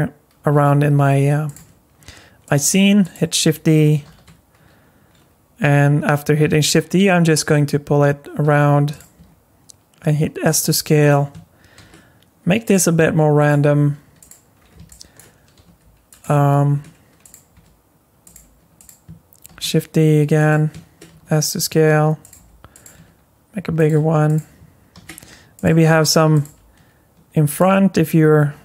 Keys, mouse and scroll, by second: 0.4 shift+d, 1.5 s, 2.6 g, 4.0 shift+d, 9.2 s, 10.6 g, 11.8 shift+d, 12.8 s, 13.7 g, 14.6 scroll down 1, 14.9 shift+middle click, 15.6 g, 16.7 shift+d, 17.5 s, 18.3 g, 19.5 shift+d, 21.1 s, 22.3-26.5 typing, 27.6 s.